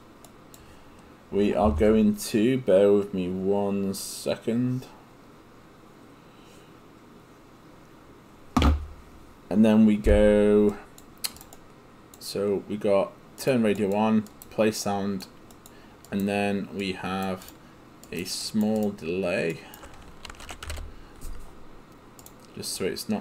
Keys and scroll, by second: 20.4-21.2 typing.